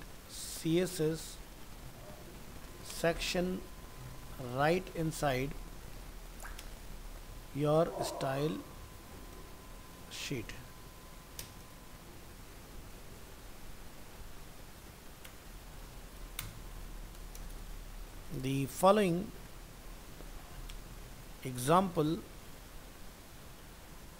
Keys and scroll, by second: 12.2 ctrl+Left.